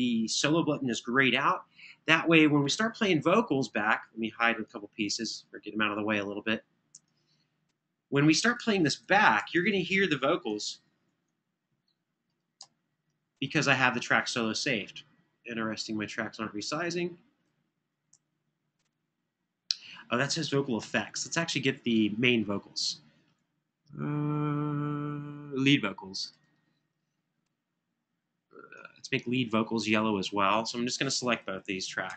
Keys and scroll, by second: 2.8 super+=, 10.5 ctrl+alt+Down, 13.2 ctrl+alt+Up, 17.8 super+], 20.6 super+=.